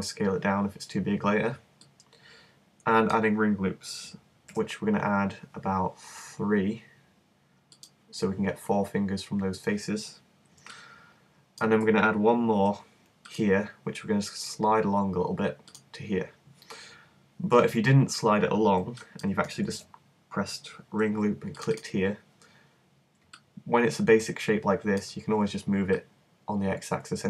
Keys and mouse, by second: 4.5 ctrl+r, 7.8-9.7 drag, 10.7-12.7 middle drag, 12.7 ctrl+r, 17.5-19.7 middle drag, 19.7 super+z, 21.1 ctrl+r.